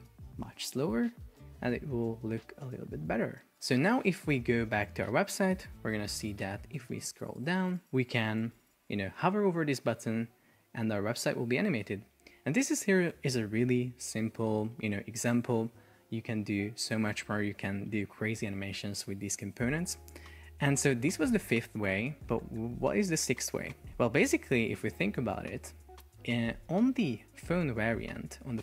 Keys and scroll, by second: 6.1 super+p.